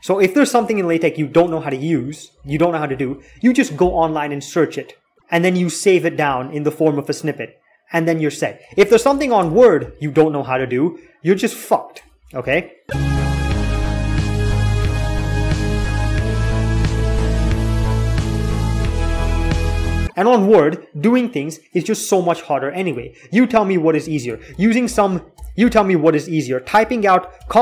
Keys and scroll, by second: 0.3 alt+8, 2.9 alt+2, 8.6 alt+x, 9.2 alt+x, 12.2 BackSpace, 24.4 alt+x, 24.6 alt+x, 25.1 alt+x, 25.6-27.6 typing.